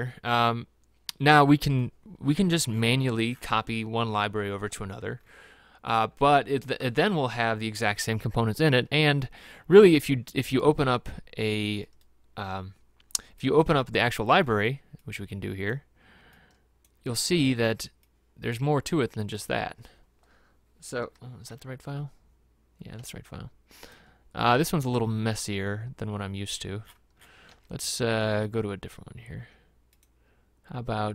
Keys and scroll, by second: 21.7 alt+Tab, 27.7 alt+Tab.